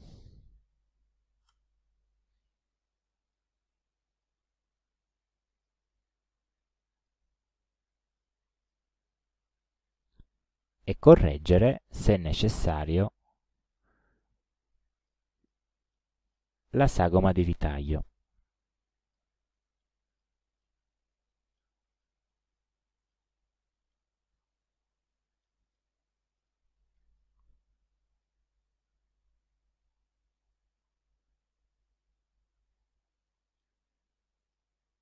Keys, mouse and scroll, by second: 0.5 KP_1, 0.8 KP_0, 1.5 Return, 3.3 click, 4.2-5.9 drag, 7.0 click, 8.6 click, 11.8 click, 12.5 click, 13.3 ctrl+middle click, 13.3-13.6 ctrl+scroll up 1, 15.0 click, 16.0 click, 26.4 click, 28.2 alt+Down, 30.5 alt+Up, 31.2 alt+Right, 33.5-33.8 scroll up 3, 33.8 ctrl+scroll down 2, 34.5-35.0 ctrl+scroll up 2.